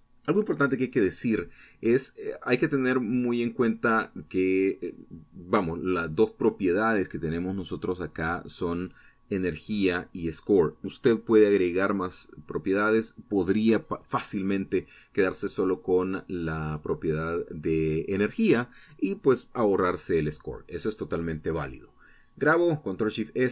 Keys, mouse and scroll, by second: 13.1 Escape, 18.2 ctrl+shift+s.